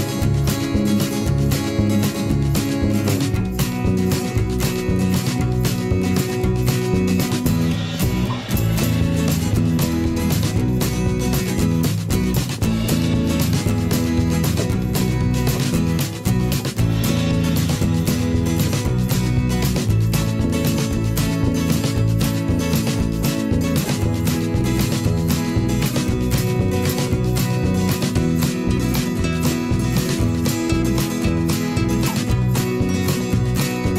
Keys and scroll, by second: 3.7 ctrl+[, 11.4 ctrl+shift+[, 11.6 ctrl+], 15.0 ctrl+[, 16.4 ctrl+], 19.1 ctrl+shift+[, 19.3 ctrl+], 21.8 ctrl+[, 22.7 ctrl+], 23.2 ctrl+[, 23.8 ctrl+], 25.2 ctrl+shift+[, 25.4 ctrl+], 26.0 ctrl+[, 31.2 Delete.